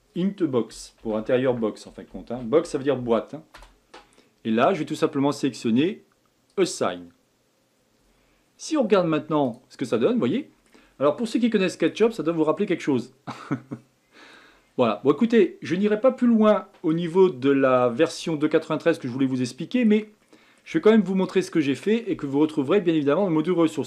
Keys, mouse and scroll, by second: 6.5-9.5 drag, 10.0 middle click, 10.9 scroll down 3, 11.6 middle click, 12.0 Tab, 12.4 scroll up 1, 12.9-14.4 middle drag, 14.4 scroll up 1, 14.7-15.2 scroll down 4, 15.2-17.2 middle drag, 17.2-17.8 scroll down 3, 17.8-21.5 shift+middle drag, 21.5-22.7 scroll up 2, 22.7-23.2 scroll up 1, 23.2-23.8 middle drag.